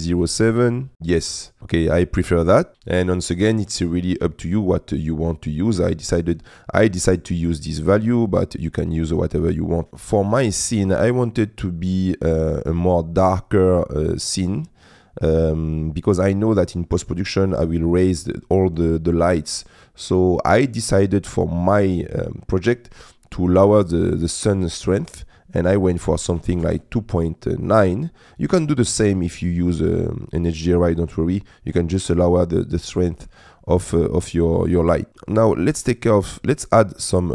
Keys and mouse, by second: 25.0-26.7 drag.